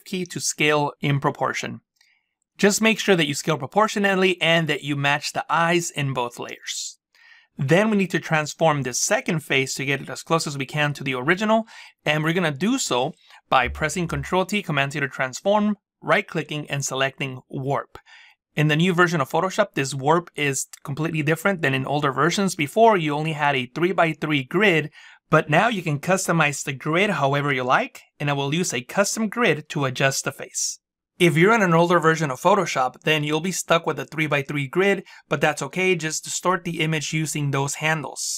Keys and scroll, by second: 14.1 ctrl+t.